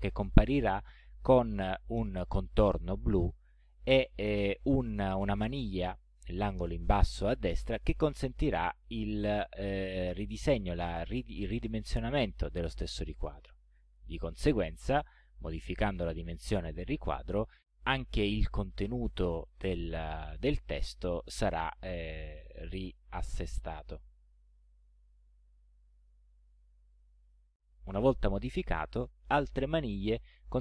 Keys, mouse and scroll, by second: 9.4-15.6 drag, 27.3-28.3 drag, 29.3-30.6 drag.